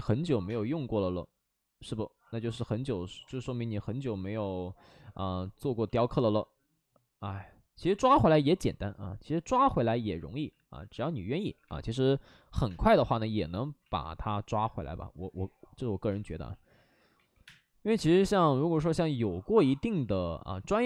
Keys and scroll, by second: 0.0-0.4 typing, 2.1 ctrl+z, 2.4 2, 3.0 ctrl+z, 3.1 space, 7.9 3, 11.4-12.2 typing, 13.7 ctrl+z, 16.0 space, 16.2 ctrl+z, 16.4 ctrl+z, 17.1 2, 17.4 space, 17.9 space, 19.6 ctrl+z.